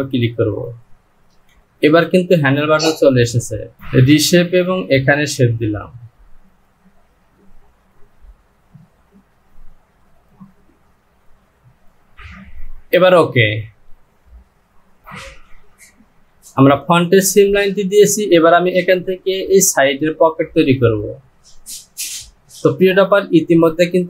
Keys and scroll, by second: 12.2 Home.